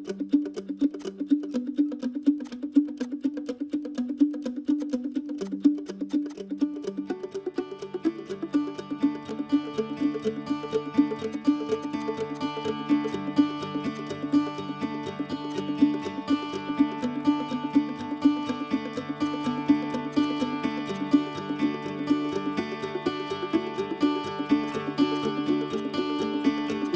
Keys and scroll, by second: 2.0 ctrl+z, 7.1 Escape, 12.1 Escape, 12.9 b, 14.9 Escape, 22.7 Escape, 22.9 Escape, 23.1 Escape.